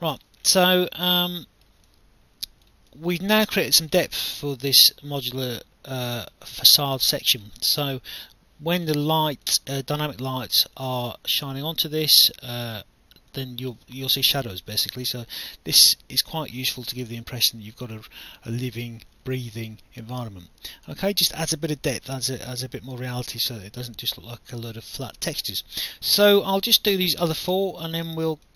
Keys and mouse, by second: 0.9 alt+click, 1.4 alt+middle click, 1.9 alt+click, 4.2 alt+click, 7.6 alt+click, 9.5 alt+click, 10.8 alt+click, 13.3 alt+click, 14.7 alt+click, 16.7 alt+click, 18.2 alt+click, 19.5 alt+click, 21.8 alt+click, 24.0 alt+click, 25.8 alt+click, 26.4 alt+middle click, 27.7 alt+click.